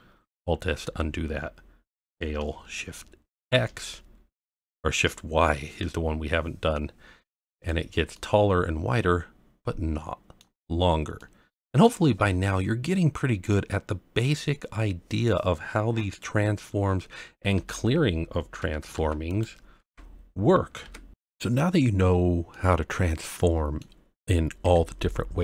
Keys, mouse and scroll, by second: 0.8 alt+s, 1.9 s, 3.4 shift+x, 5.6 shift+y, 7.5 click, 8.1-10.4 middle drag, 10.7-11.2 scroll down 1, 11.2-11.8 middle drag, 12.3-13.1 scroll up 2, 13.1-13.4 scroll down 1, 13.5-15.2 middle drag, 17.5 alt+r, 18.9 alt+r, 19.3 click, 19.8 alt+r, 20.8 alt+s, 22.5-23.7 middle drag, 24.6 KP_Decimal, 25.2 scroll down 2.